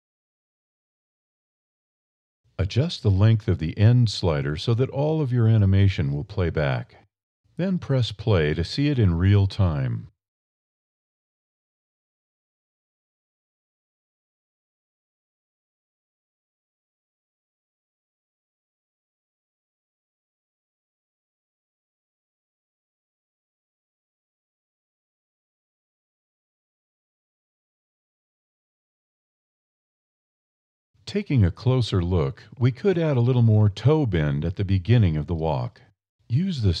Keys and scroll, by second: 1.0 1, 2.9 a, 33.8 Up, 34.2 Down, 34.4 Up, 34.7 Down, 34.9 Up.